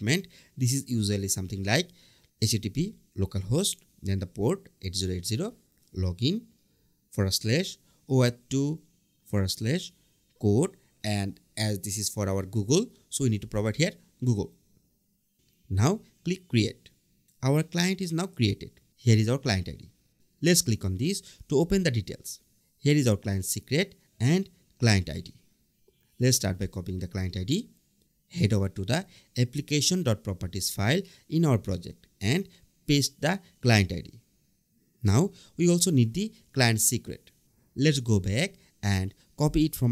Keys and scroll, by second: 10.2 BackSpace, 30.1 super+v, 34.3 super+Tab.